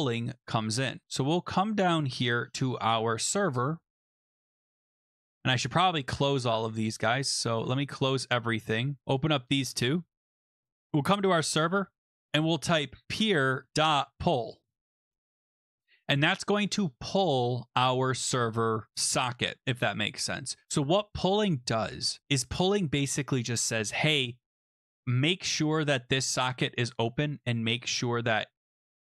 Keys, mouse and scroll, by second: 0.7-1.1 scroll down 4, 2.0 scroll up 3, 2.2-2.9 scroll, 2.9-3.9 scroll, 3.9-4.4 scroll, 4.8 click, 5.7-6.3 scroll, 6.4 right click, 7.5 click, 9.0 click, 9.0 click, 10.3 click, 12.1 click, 12.4 Return, 12.6-15.6 typing, 14.5 middle click, 15.1-15.4 scroll, 16.9-17.5 scroll, 24.7 click, 26.9 click.